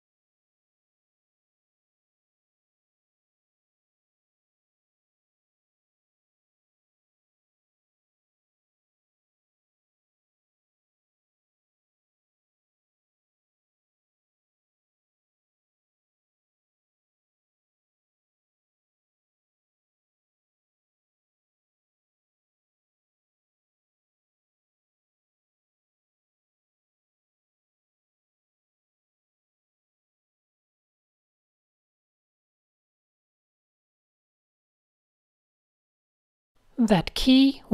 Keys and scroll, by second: 0.7 super+z, 2.7 super+z, 2.8-6.8 typing, 4.6 super+z, 9.5-12.5 typing, 16.0 n, 17.5 a, 18.1 fn+F2, 18.5 shift+super+{, 18.7 shift+super+a, 19.2 n, 20.9 a, 21.3 fn+F2, 21.5 shift+super+{, 21.9 shift+super+a, 23.6 n, 24.9 super+z, 27.2 super+z, 27.8 super+z, 28.6 super+z, 30.7 v, 32.9 shift+super+a, 35.9 super+space, 36.2-36.6 typing.